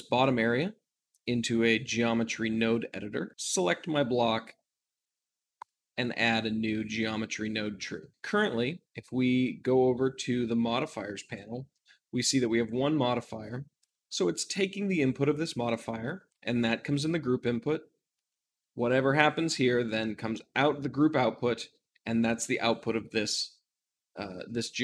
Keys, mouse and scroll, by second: 0.0-6.5 drag, 6.5 middle click, 7.3 shift+middle click, 8.2-24.8 drag.